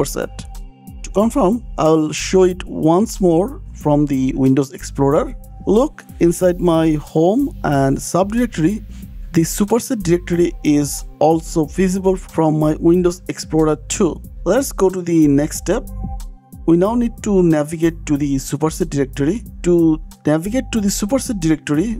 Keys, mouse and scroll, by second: 2.0 click, 3.3 click, 3.7 click, 4.7 click, 13.8 click, 14.5 click, 15.0 click, 16.6-17.0 scroll down 7, 17.1 click, 18.2 scroll, 18.4 click, 19.3-20.4 typing.